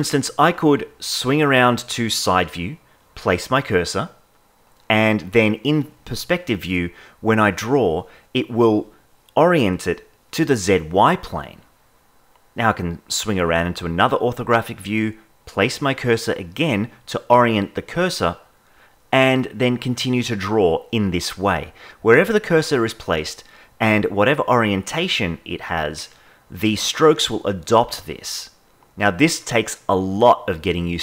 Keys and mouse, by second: 0.8 KP_3, 4.1 click, 5.0 KP_0, 6.3 click, 7.7-8.9 drag, 9.7 click, 11.1 click, 12.5 click, 12.5 KP_7, 14.9-16.0 drag, 16.1 click, 17.6 KP_0, 21.2 click, 22.8 click, 24.1 click, 25.5 click, 27.8 click.